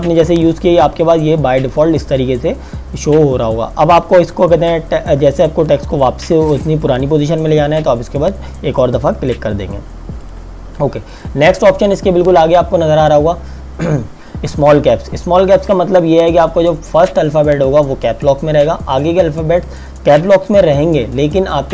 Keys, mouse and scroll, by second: 5.9 click, 8.8 click.